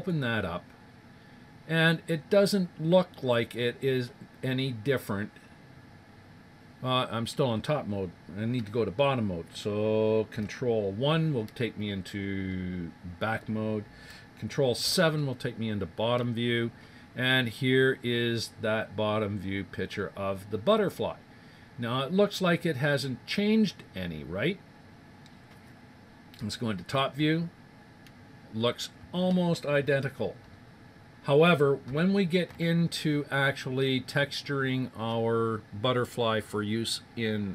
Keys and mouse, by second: 0.0-1.9 drag, 1.4 middle click, 1.7 middle click, 1.9-6.8 middle drag, 21.8-25.8 middle drag, 27.2 KP_7.